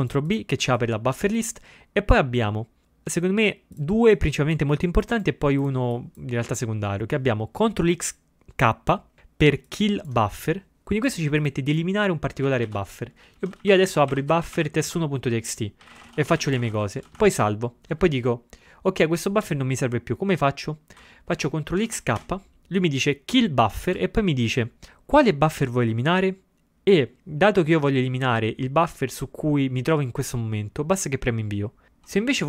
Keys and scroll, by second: 12.5 ctrl+x, 12.8 ctrl+f, 13.2-15.1 typing, 16.8-17.6 typing, 22.0 ctrl+x, 22.2 k.